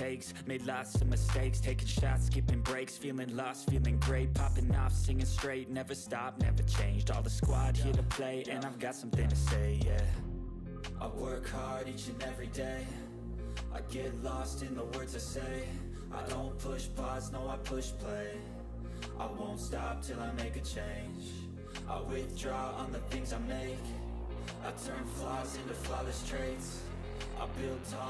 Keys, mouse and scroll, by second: 6.7 Return, 6.8-8.2 drag, 8.2 ctrl+c, 8.6 click, 9.1 Return, 9.4 ctrl+v, 10.1 ctrl+s, 11.4 click, 12.5 g, 13.9 g, 15.8 g, 16.4 click, 26.4 click, 26.8-28.0 typing.